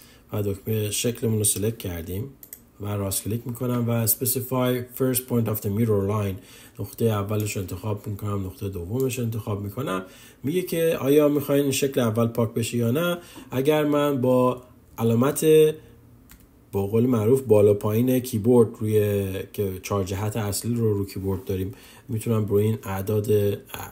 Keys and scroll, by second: 14.7-15.4 typing.